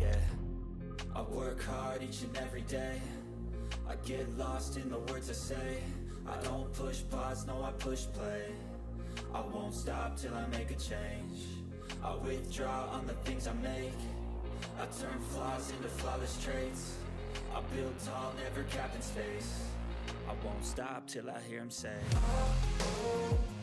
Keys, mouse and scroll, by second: 1.0-2.2 typing, 2.7 ctrl+space, 3.7 typing, 3.9 click, 7.9 click, 8.0 click, 9.7-10.9 typing, 13.5-19.0 typing, 21.4 click.